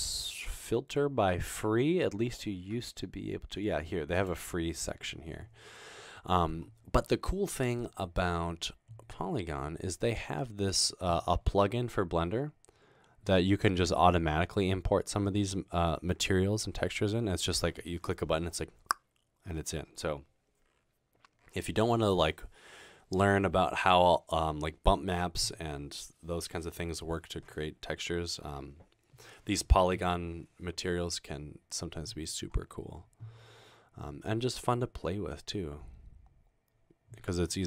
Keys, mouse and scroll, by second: 6.3-6.6 scroll down 2, 6.6 scroll up 2, 11.2-14.1 scroll down 2, 14.7-17.1 scroll down 4, 16.5 middle click, 21.1-21.9 scroll down 2, 29.1 middle click, 29.1 scroll down 2, 29.3 scroll up 2, 29.5 scroll down 2, 29.5 scroll up 2, 29.9 middle click, 29.9 scroll down 2, 30.9-31.5 scroll down 2, 32.9 scroll down 2, 33.1-33.5 scroll up 2, 34.3-36.6 scroll down 2.